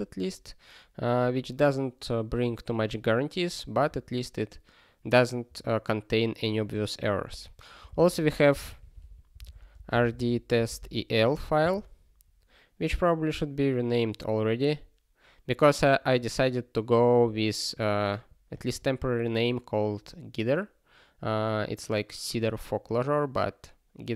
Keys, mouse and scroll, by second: 0.1-0.4 scroll up 1, 1.3 scroll up 1, 2.2-3.0 scroll up 1, 3.0 scroll down 1, 3.5 scroll down 1, 4.3 scroll down 1, 7.3 super+b, 8.7 ctrl+g, 12.9-14.1 scroll up 2, 14.4 scroll down 1, 17.4 click, 18.2 click, 18.5 click, 18.7 double click.